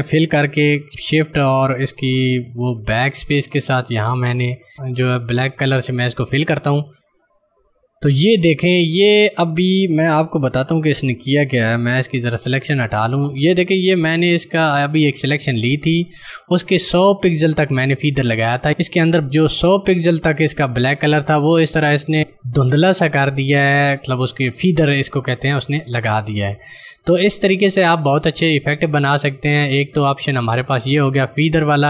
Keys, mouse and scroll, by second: 0.3 shift+Num_Lock, 3.4 BackSpace, 6.4 click, 12.4 ctrl+d, 13.7 click, 25.7 right click, 26.2 click.